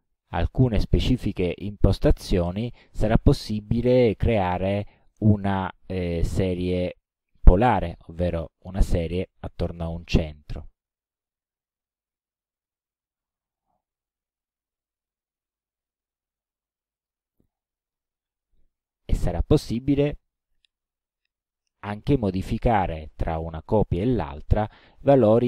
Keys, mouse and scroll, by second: 0.0 KP_0, 3.7 click, 5.1 click, 7.1 KP_3, 7.4 KP_6, 9.0 click, 17.0 click.